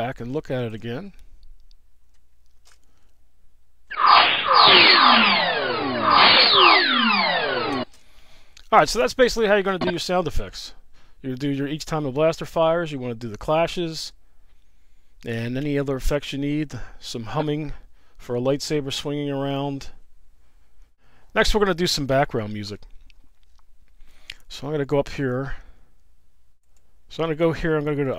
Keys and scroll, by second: 2.5 space, 7.8 space, 8.7 space.